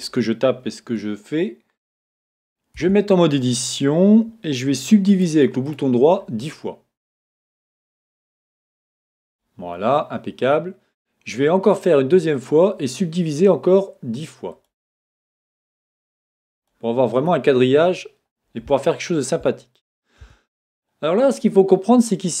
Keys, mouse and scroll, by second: 2.7 Tab, 5.1 right click, 7.4-10.3 drag, 11.7-14.5 right drag, 14.5-17.5 drag, 18.7-22.4 shift+middle drag, 20.2 a.